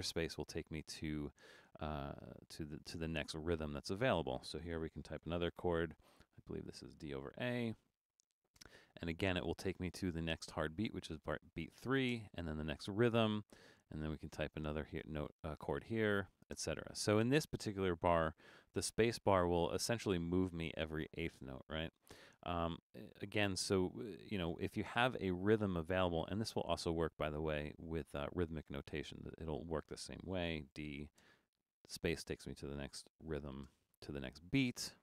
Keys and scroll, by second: 0.2 space, 5.2 shift+d, 6.2 /, 7.5 shift+a, 8.6 space, 12.2 space, 13.9 shift+a, 15.0 space, 18.7 d, 30.7 shift+d, 31.2 space, 32.9-33.6 typing, 34.6-35.0 typing.